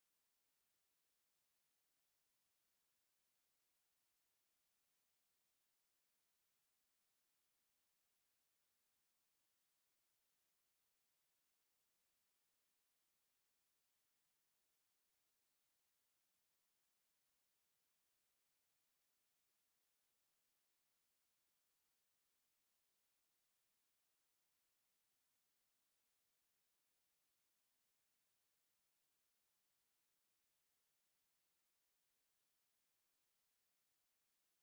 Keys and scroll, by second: 0.1-2.2 typing, 0.2 ctrl+BackSpace, 3.3 ctrl+e, 3.5 Down, 4.2 End, 5.2 Up, 5.7 ctrl+Down, 6.9 space, 7.1 space, 8.7 space, 9.4 space, 9.8 space, 10.3 space, 11.5 space, 12.7 space, 13.1 space, 13.7 ctrl+e, 14.2 End, 14.4 Up, 15.6 End, 16.3 Down, 18.1 space, 18.5 ctrl+BackSpace, 19.6 Down, 20.2 space, 21.0 Down, 22.7 End, 23.2 Left, 24.1 ctrl+BackSpace, 25.3 End, 25.6 space, 27.8 End, 28.1 ctrl+s, 28.8 ctrl+Left, 29.0 Home, 29.2 ctrl+Right, 30.9 ctrl+Right, 31.4 Right, 33.1 ctrl+Left, 33.3 Delete, 33.8 End, 34.0 Left.